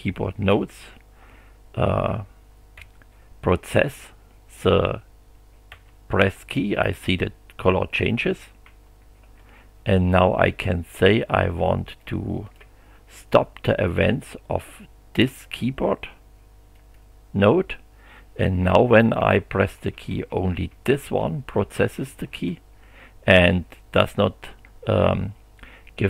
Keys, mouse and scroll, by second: 0.5 b, 1.3 h, 2.8 f, 3.7 d, 5.7 f, 8.6 g, 9.2 h, 12.0-12.7 drag, 16.7 click, 18.7 g.